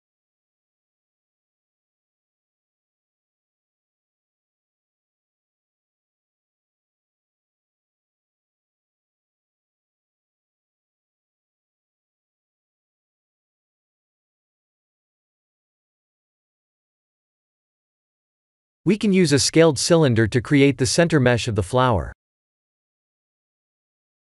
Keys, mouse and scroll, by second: 1.6 middle click, 6.6 KP_1, 7.1 scroll up 2, 7.8-8.8 scroll up 1, 7.8 shift+z, 8.9 shift+z, 11.1 click, 11.8 middle click, 11.8 middle click, 11.9 middle click, 13.2 KP_1, 13.6 KP_7, 14.4 click, 14.9 shift+z, 15.8 shift+z, 16.2 click, 16.7 h, 17.8 click, 18.0 h, 18.7 click, 19.9 shift+a, 23.5 s.